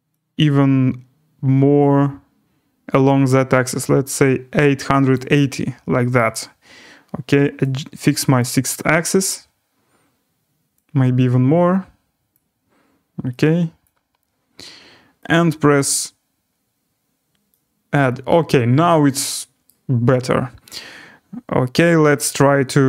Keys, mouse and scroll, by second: 5.1 click, 6.1 right click, 8.3 click, 12.3 click, 13.8 click, 15.2 click, 19.6 right click.